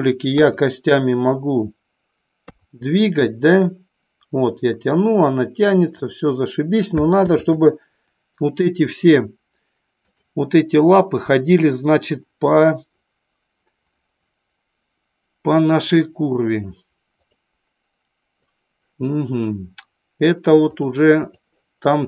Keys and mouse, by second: 0.4 KP_1, 2.4 KP_3, 3.4-5.9 drag, 7.4 ctrl+z, 10.0 click, 17.1 click, 20.6-21.4 drag.